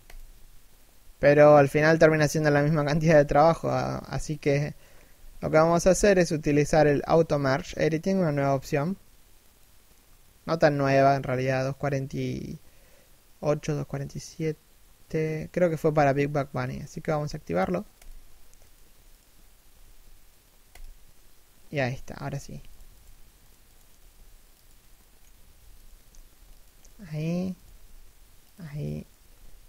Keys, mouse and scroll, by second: 4.0 middle click, 4.7 a, 5.6 right click, 18.3 right click, 18.5 g, 19.5 g, 21.4 middle click, 21.9 right click, 22.0 g, 22.5 right click, 22.7 g, 23.3 right click, 23.6 g, 24.6 middle click, 25.4 right click, 25.5 g, 26.5 middle click, 27.2 right click, 27.3 g, 28.6 right click, 28.8 g.